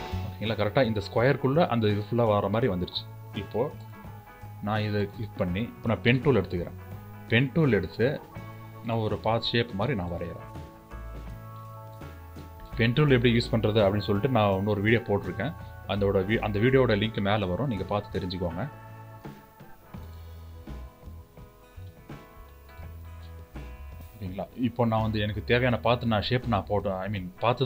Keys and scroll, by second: 5.8 p.